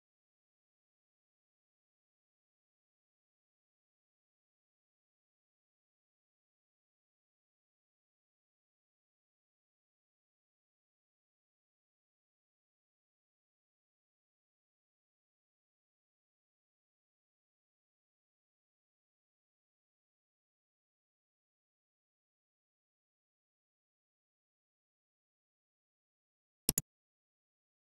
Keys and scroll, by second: 0.0-3.3 typing, 3.7 Return, 4.5-9.5 typing, 9.0 Return, 9.8 Return, 10.5 Left, 10.7-12.6 typing, 12.1 Return, 13.0 Return, 13.7 F2, 13.8-15.5 typing, 15.9 Return, 17.0 Left, 17.4-19.7 typing, 20.2 Return, 20.9-22.4 typing, 22.9 Return.